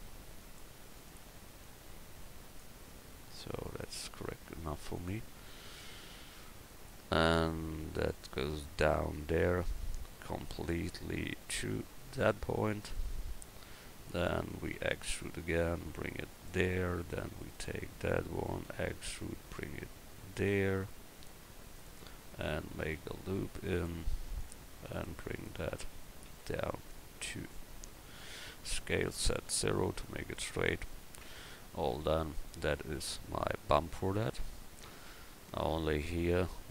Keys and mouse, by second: 0.9-2.6 right drag, 4.9-7.9 right drag, 8.1 click, 13.4-14.7 middle drag, 14.7 e, 15.6 click, 17.0 right click, 18.0 click, 18.6 e, 22.8 ctrl+r, 26.3 e, 28.7 s, 31.2 Tab.